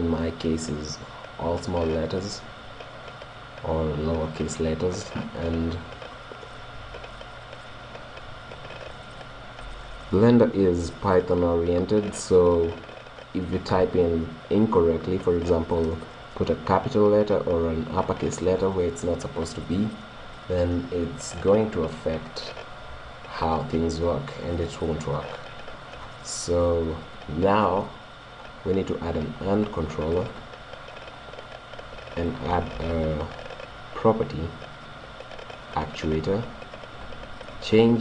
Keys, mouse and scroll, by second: 2.7 right click, 24.4 middle click, 25.1-26.1 scroll up 1, 25.2 middle click, 25.7 middle click, 26.0 middle click, 26.1-26.7 scroll down 1, 26.7 middle click, 28.5-29.6 middle drag, 29.6-31.5 drag, 31.1-33.0 middle drag, 32.4-34.1 drag, 37.1-38.0 drag.